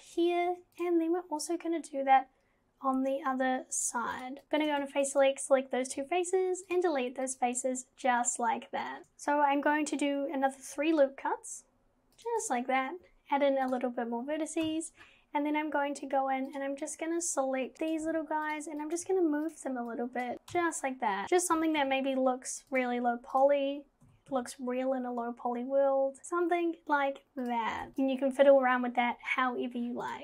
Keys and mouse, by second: 0.5 ctrl+r, 4.4 ctrl+z, 5.0 shift+click, 6.0 x, 7.2 click, 9.0 ctrl+z, 10.6 ctrl+r, 13.7 click, 14.7 KP_1, 16.5 click, 17.8 click, 17.8 g, 18.0 g, 18.8 click, 19.0 g, 20.1 click, 20.3 g, 20.5 KP_1, 21.2 g, 21.2 x, 23.4 click, 23.4 g, 24.1 g, 27.4 click, 27.8 g.